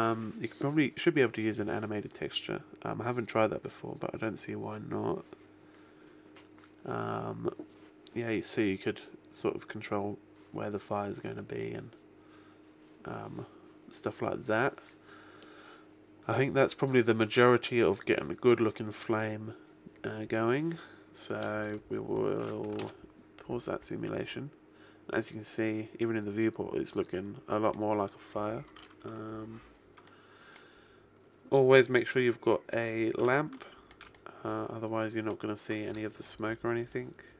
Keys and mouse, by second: 19.0-20.2 middle drag, 22.2 middle click, 23.0 alt+a, 23.8-28.0 middle drag, 31.8 middle click, 32.1-33.5 right drag, 36.1 g, 36.8 click.